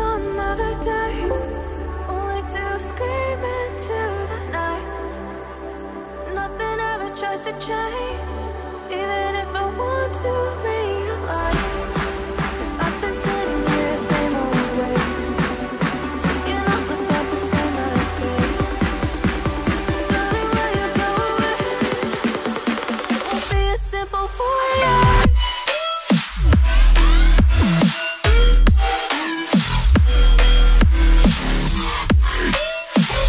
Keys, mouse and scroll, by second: 0.0-0.6 typing, 4.1-5.5 scroll down 1, 14.1 right click, 16.2 right click, 21.7 ctrl+a, 22.5-25.8 typing, 28.6 ctrl+scroll up 1, 30.4 ctrl+scroll up 2, 32.3 right click.